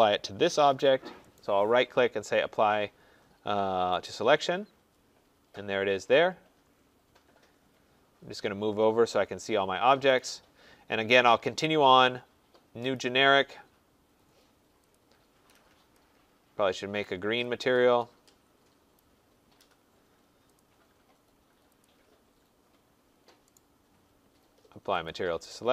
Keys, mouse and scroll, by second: 1.3 right click, 4.0 click, 6.9-7.7 scroll, 7.7-8.7 scroll, 8.7-9.2 scroll, 10.1 click, 11.5 click, 12.9 click, 14.9 click, 17.1 click, 18.9 click, 20.5 click, 22.0 click, 23.5 right click, 25.0 click.